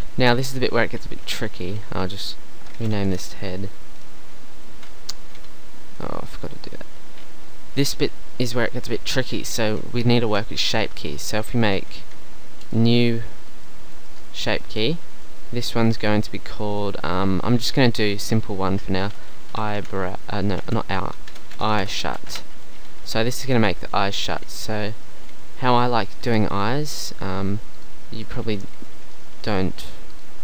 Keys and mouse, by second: 10.1-12.0 middle drag, 12.7-15.3 middle drag, 15.8-18.5 middle drag, 23.0 Tab, 23.5 Tab, 26.3 Tab.